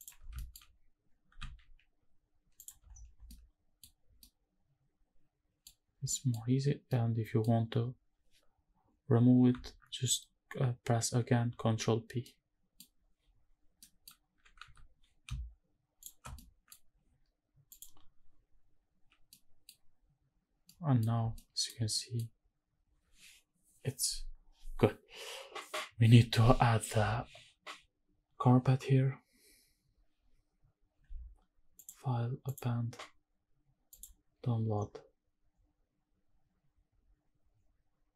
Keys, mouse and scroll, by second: 0.0 shift+click, 0.4 shift+middle drag, 0.4-1.4 scroll up 5, 1.4 shift+g, 2.6 shift+click, 2.9-3.3 scroll down 3, 3.3-3.8 middle drag, 3.9 scroll up 1, 4.1 scroll down 1, 4.2-5.7 middle drag, 6.0 scroll down 1, 6.1 middle click, 6.9 middle click, 11.5 alt+b, 12.2 middle click, 13.8 middle click, 14.3 g, 14.6 x, 16.0 shift+click, 16.3-16.7 middle drag, 18.0 click, 19.3 middle click, 20.7 middle click, 21.4 shift+middle click, 21.9 middle click, 30.7 m, 31.8-32.6 drag.